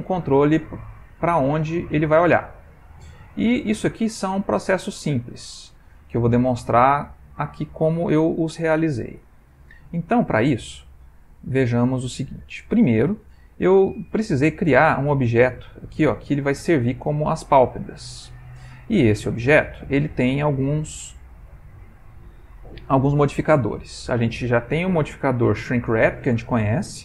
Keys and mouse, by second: 0.0 g, 8.0 middle click, 10.8 click, 11.6 middle click, 13.6 click, 14.6 g, 15.9-19.4 middle click, 21.1 click.